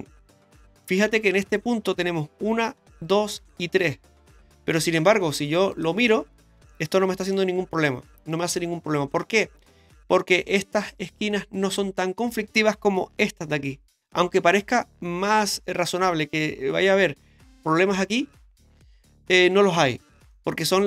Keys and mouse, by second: 5.7 click, 6.0 Tab, 6.7 middle click, 20.3 middle drag.